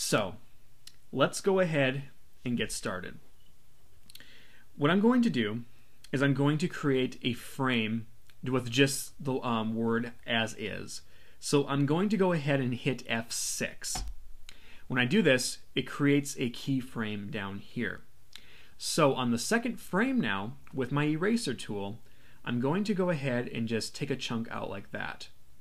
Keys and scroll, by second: 13.9 F6.